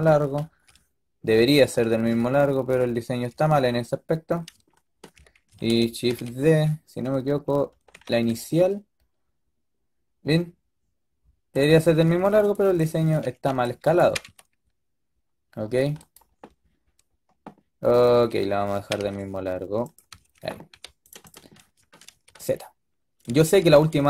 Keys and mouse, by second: 1.2-4.0 drag, 4.0-6.0 middle drag, 6.0 shift+d, 12.8 click, 12.9 a, 13.1 a, 13.4 b, 13.9 g, 18.0 a, 18.3 a, 18.6 g, 20.0 a, 20.2 a, 20.6 a, 22.0 z, 22.3 drag.